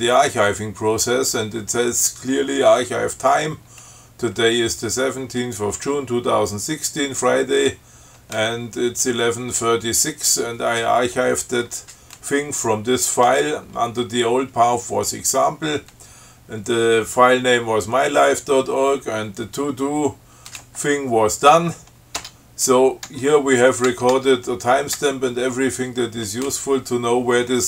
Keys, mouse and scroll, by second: 22.4 Tab, 23.4 Tab, 24.1 Tab, 25.2 Tab.